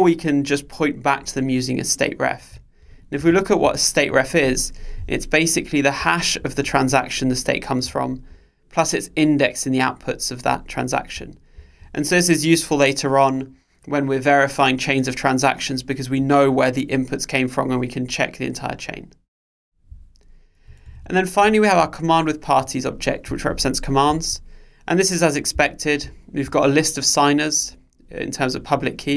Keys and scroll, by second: 3.0 super+b, 23.1 super+b.